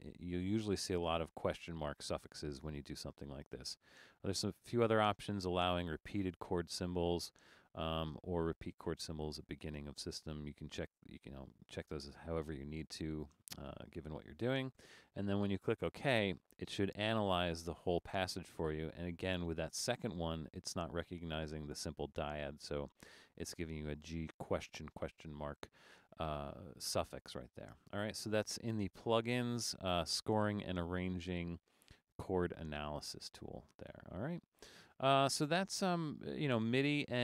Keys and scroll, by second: 35.2 super+z.